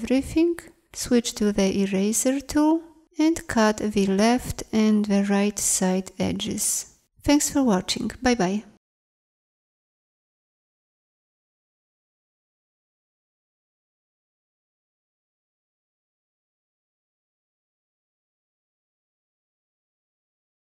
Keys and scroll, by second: 1.2 shift+e, 10.3 c, 11.1 z, 12.9 c, 15.2 z, 17.1 c, 17.4 Delete.